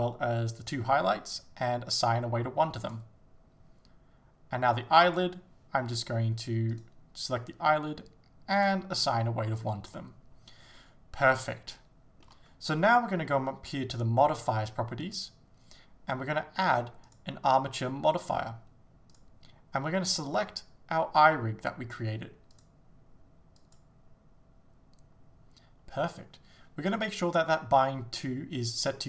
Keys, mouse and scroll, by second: 2.9-5.2 drag, 6.8 right click, 8.7-10.0 drag, 10.0 shift+middle click, 19.2-29.0 drag.